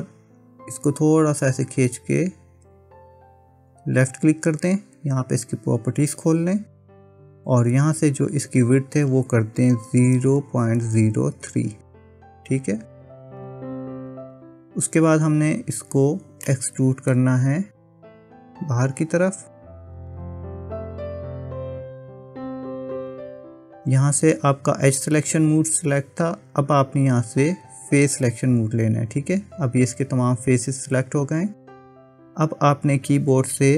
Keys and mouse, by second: 6.1 click, 9.0-13.3 drag, 14.7 click, 16.5 middle click, 19.9 click, 21.3 middle click, 28.1 click.